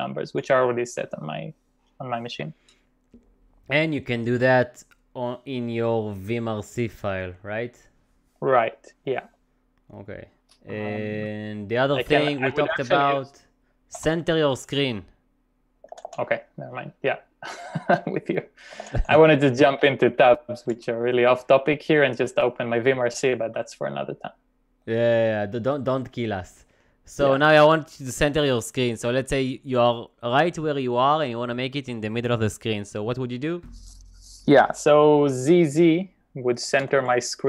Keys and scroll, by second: 14.1 ctrl+w, 14.2 ctrl+n, 16.0 ctrl+w, 18.8 ctrl+w, 19.0 ctrl+w, 20.7 c, 36.9 typing.